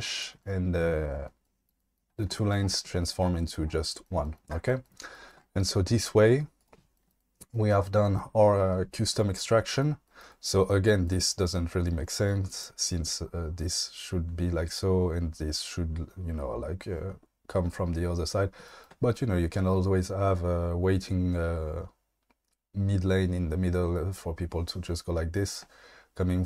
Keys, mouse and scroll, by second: 6.6 click.